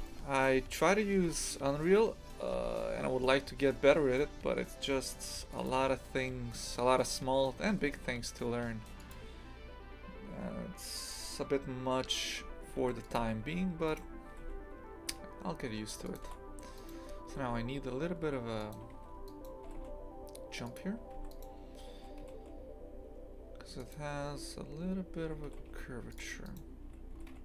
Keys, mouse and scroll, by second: 0.1 shift+middle click, 0.5-1.2 scroll up 2, 1.2 1, 1.3 right click, 2.4 g, 12.8 ctrl+r, 13.9 right click, 14.3 g, 16.8 right click, 17.3 g, 18.9 2, 19.3 right click, 19.6 g, 21.2 1, 21.3 right click, 22.2 g, 26.5 right click, 27.1 g.